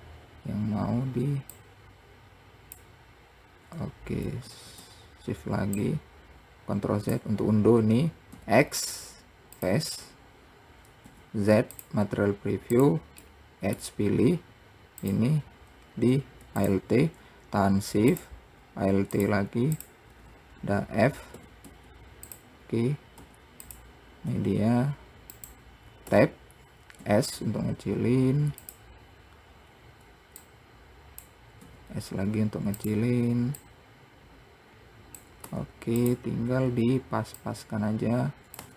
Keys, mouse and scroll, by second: 1.8 shift+click, 4.7 ctrl+z, 6.0 shift+click, 8.6 x, 13.0 click, 13.5 middle click, 14.3-15.3 scroll up 1, 15.3 click, 16.8 alt+click, 18.4 shift+click, 19.4 alt+shift+click, 20.0 alt+shift+click, 21.6 f, 24.6 s, 30.0-30.4 scroll up 2, 30.7 click, 31.9 s, 33.9 click, 36.9-37.7 scroll up 2, 37.7 click.